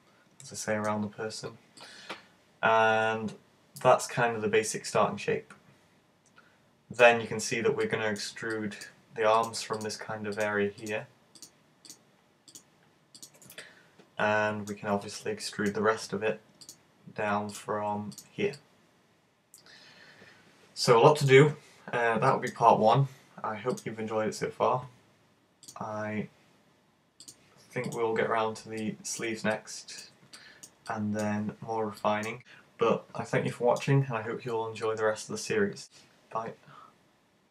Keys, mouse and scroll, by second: 1.8 middle click, 7.8 click, 8.5 middle click, 9.4 right click, 9.8 shift+right click, 10.4 right click, 10.5 shift+right click, 10.9 shift+right click, 11.0 shift+right click, 11.4 shift+right click, 11.9 shift+right click, 12.6 shift+right click, 13.6 shift+right click, 13.6 middle click, 15.5 middle click, 16.7 right click, 17.6 right click, 18.2 shift+right click, 18.4 shift+right click, 18.5 middle click, 22.0-22.3 scroll down 4, 22.3 middle click, 29.1 click, 29.3 middle click, 29.6 middle click, 31.0 middle click, 33.5 middle click.